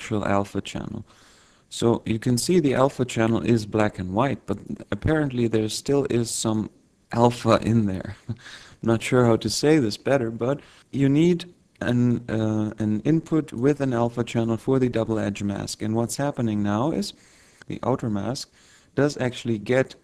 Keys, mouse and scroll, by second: 0.0-1.6 scroll down 2, 5.7 click, 11.1 click, 12.6 click.